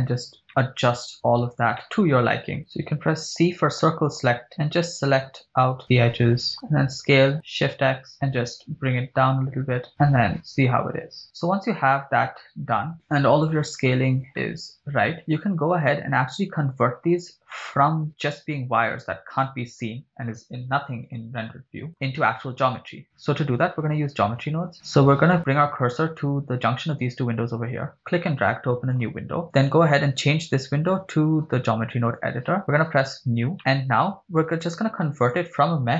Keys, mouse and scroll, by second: 0.1-0.4 scroll down 2, 0.5 middle click, 1.1 KP_1, 1.8 shift+middle click, 1.8 scroll up 1, 2.6 shift+middle click, 2.6 scroll up 4, 2.6 c, 10.0 Tab, 10.0 ctrl+click, 10.3-13.9 shift+middle drag, 10.3 scroll up 4, 12.9 scroll up 3, 14.5-15.2 middle drag, 17.6-18.1 middle drag, 19.3 click, 21.1 click, 21.9 middle drag, 26.9-29.0 drag, 29.5 click, 32.2 click, 33.0-33.3 drag, 33.6 middle click, 33.6-34.1 scroll up 6, 34.4 shift+a.